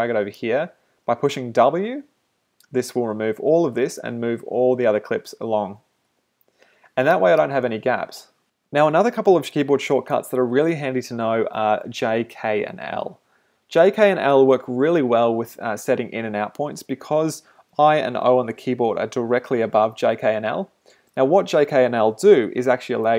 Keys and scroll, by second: 6.1 w, 7.5 space.